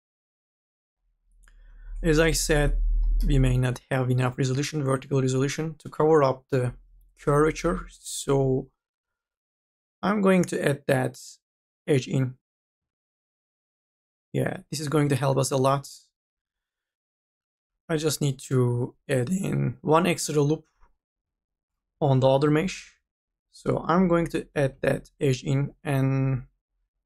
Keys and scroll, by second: 2.7-3.7 typing, 8.9 k, 9.3 l, 21.7-23.2 typing.